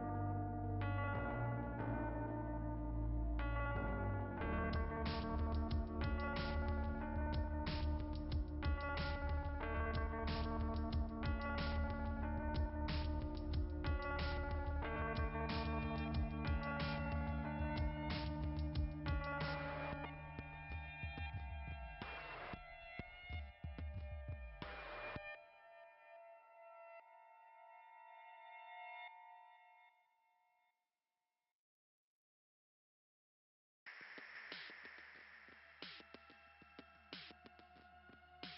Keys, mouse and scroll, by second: 1.9 click, 6.7 click, 8.7 click, 12.7 click, 18.5 click, 20.9 click, 22.8 click, 26.5 click, 30.5 scroll up 2, 32.4-32.9 scroll up 2, 36.0 click, 36.9 click.